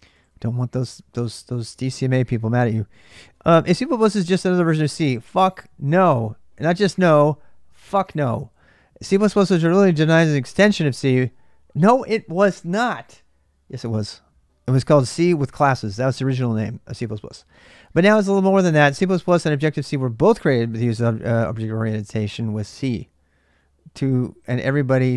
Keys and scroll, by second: 0.0-0.1 typing, 1.0 alt+Tab, 1.7-2.5 typing.